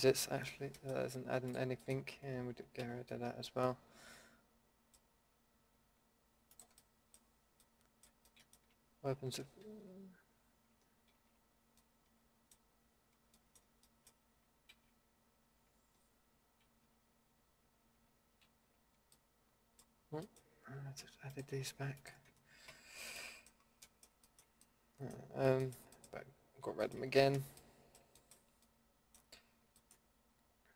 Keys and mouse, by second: 0.4 ctrl+x, 1.5-3.9 middle drag, 2.8 ctrl+x, 9.6 ctrl+x, 11.1 ctrl+z, 14.7 ctrl+z, 16.6 ctrl+z, 18.4 ctrl+z, 22.7 ctrl+x, 27.1 middle click, 27.6 middle click, 28.7 middle click.